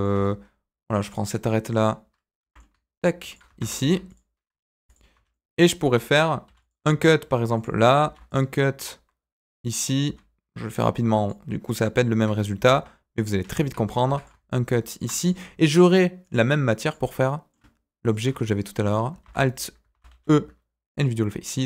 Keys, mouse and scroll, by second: 0.1 Tab, 1.0 click, 1.7 click, 2.4 g, 3.4 Tab, 3.7 ctrl+a, 4.5 ctrl+a, 5.1 Tab, 5.3 middle click, 6.4 ctrl+r, 8.0 ctrl+r, 10.0 ctrl+r, 12.5 r, 14.0 ctrl+r, 15.1 middle click, 16.2 click, 16.8 click, 17.2 middle click, 18.1 shift+click, 18.3 middle click, 19.2 alt+z, 19.9 alt+z, 20.1 alt+e.